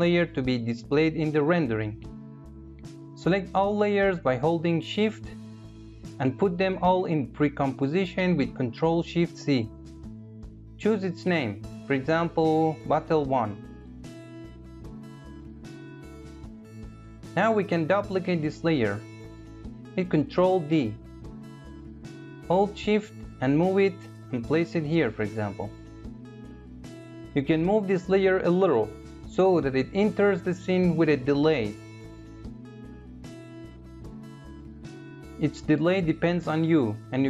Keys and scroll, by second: 7.3 ctrl+shift+c, 19.4 ctrl+d.